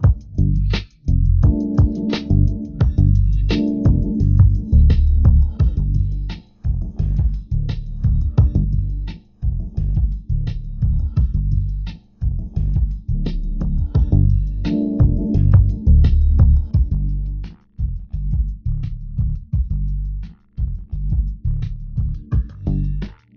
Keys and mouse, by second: 2.4 a, 2.9 b, 3.8 b, 4.4 g, 8.4 g, 12.9 a, 13.3 b, 14.8 e, 17.6 click, 17.6 e, 19.4 e, 22.0 e, 22.7 click.